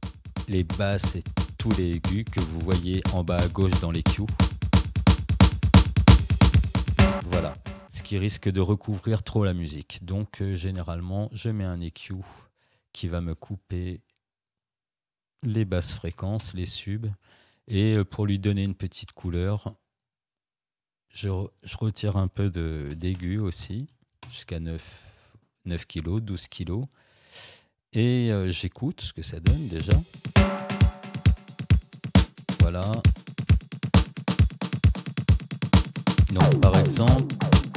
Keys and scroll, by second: 6.0 space, 15.2-16.1 typing, 16.4 Return, 22.3 9, 22.9 0, 24.2 Return, 29.4 space, 37.6 space.